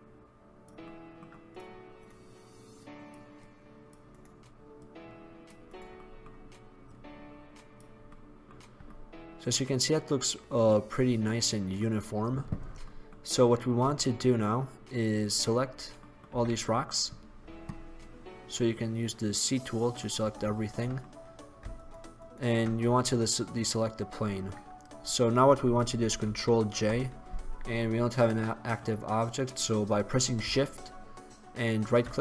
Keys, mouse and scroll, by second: 1.0-1.6 middle drag, 2.9-4.1 right drag, 4.1 click, 4.2-6.2 right drag, 6.2-6.5 middle drag, 7.6-8.2 drag, 8.2-9.5 middle drag, 10.1 middle click, 12.9-13.3 middle drag, 16.0 middle drag, 16.4 c, 20.7 middle drag, 20.9 middle click, 21.9-24.0 right drag, 24.0 middle drag, 26.4 ctrl+j.